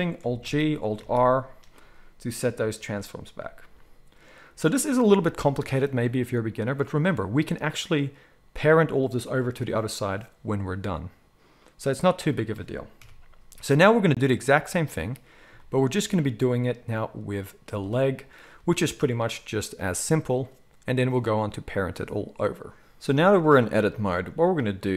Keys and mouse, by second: 0.4 alt+g, 1.0 alt+r, 13.0 KP_1, 14.5-23.0 drag, 24.0-24.9 shift+middle drag.